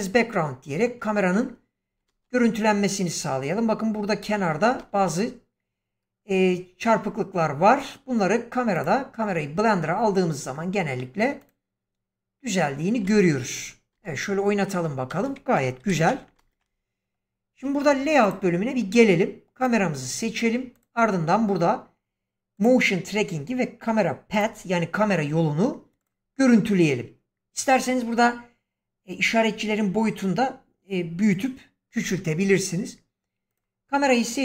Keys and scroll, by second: 2.0 ctrl+space, 4.7 ctrl+space, 12.9 ctrl+space, 13.8 space, 15.7 shift+Left, 16.3 ctrl+space.